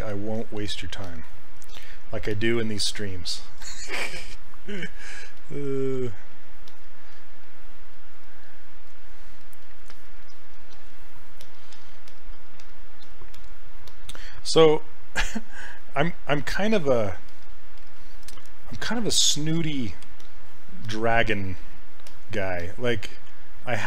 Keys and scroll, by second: 2.3 s, 3.4 s.